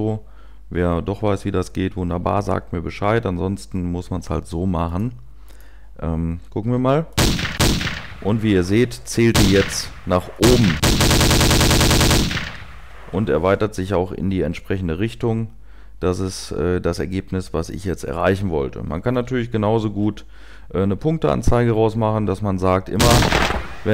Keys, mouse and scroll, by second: 6.8 0, 7.1 1, 7.5 2, 12.9 typing, 18.0 typing, 19.3 typing, 20.7 typing, 22.8 typing.